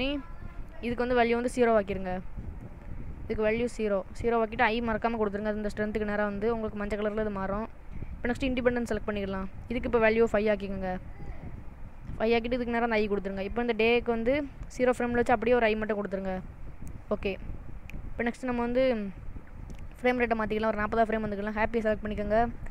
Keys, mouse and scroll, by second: 1.0 click, 8.4 click, 10.4 click, 12.6 i, 13.8 click, 15.8 i, 20.6 click, 21.9 click.